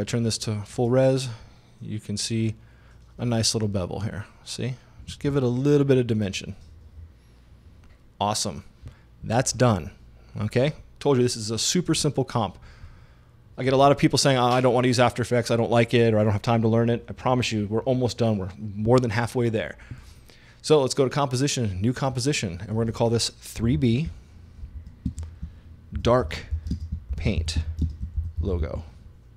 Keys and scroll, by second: 23.7-29.1 typing.